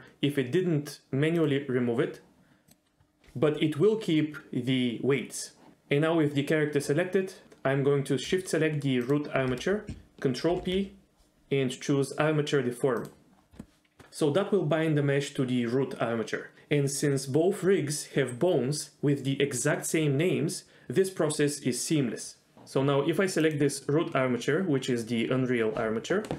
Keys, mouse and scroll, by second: 1.4 click, 2.7 click, 9.0 shift+click, 10.5 ctrl+p, 22.3 ctrl+z.